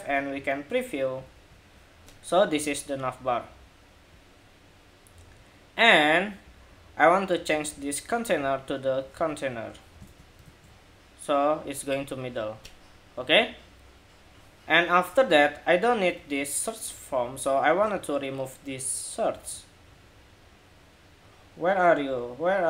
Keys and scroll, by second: 1.1 super+r, 8.8 super+s, 9.8 super+Tab, 10.2 super+r, 15.9 super+Tab, 17.5 super+Tab, 19.1 super+Tab.